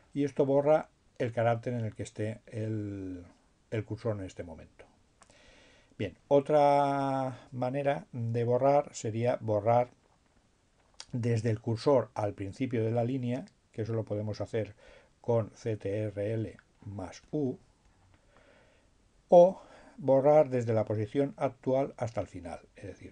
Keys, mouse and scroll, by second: 15.5-18.3 drag, 22.9-23.1 drag.